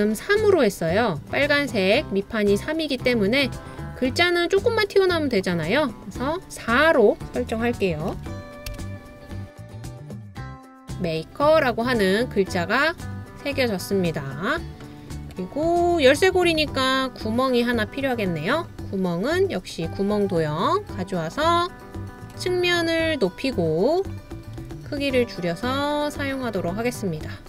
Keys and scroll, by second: 8.2 4, 8.7 Return.